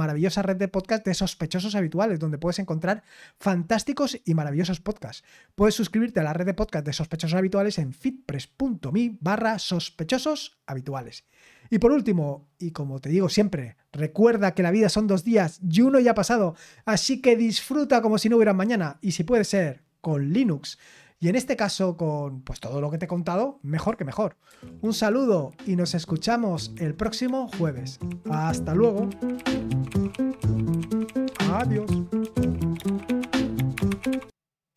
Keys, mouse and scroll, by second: 34.7 click.